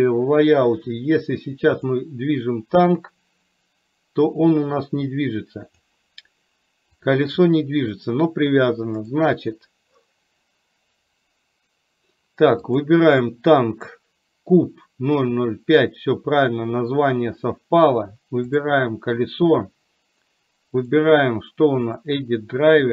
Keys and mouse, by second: 1.8 click, 3.2-6.0 drag, 7.1 click, 12.7 click, 18.5 click.